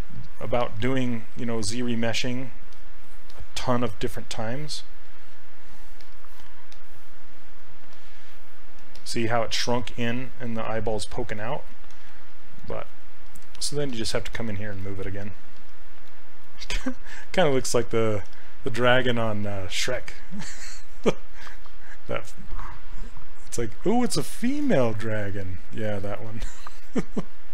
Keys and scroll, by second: 8.9 s, 12.0 s, 18.3 s.